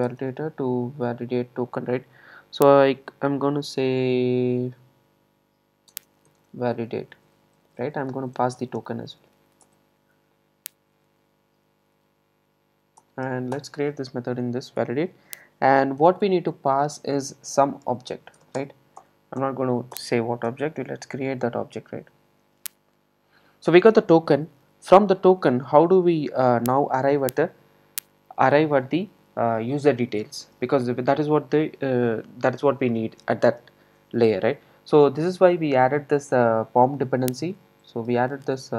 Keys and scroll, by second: 9.6 Return, 13.0 Return, 18.7 Return, 26.5 super+z, 37.2 super+n.